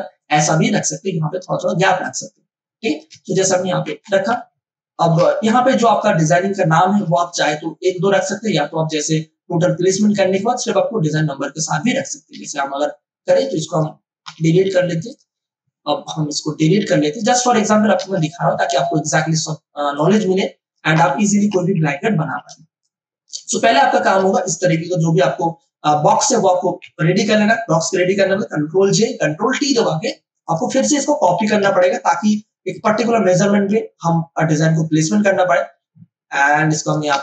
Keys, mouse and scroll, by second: 3.8 Up, 5.9 click, 5.9 click, 7.0 m, 12.3 m, 13.2 click, 13.3 click, 14.2 Delete, 15.1 click, 16.9 Delete, 18.0 ctrl+alt+z, 18.7 ctrl+d, 19.2 click, 20.9 Delete, 22.2 ctrl+d, 22.5 space, 22.8 click, 23.0 space, 24.0 click, 24.6 shift+click, 27.3 ctrl+e, 28.8 ctrl+j, 29.6 ctrl+t, 30.1 ctrl+space, 30.4 ctrl+click, 30.6 ctrl+space, 31.8 click, 32.1 space, 32.7-37.2 shift+drag.